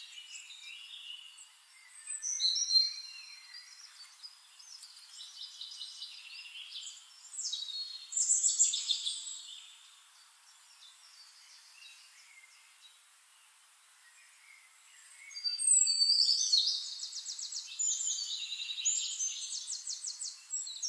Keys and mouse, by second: 5.1 click, 6.9 click, 8.5 shift+click, 10.5-12.5 drag, 11.3-12.5 middle drag, 11.3-12.5 right drag, 13.3-15.4 drag, 16.3-20.8 drag.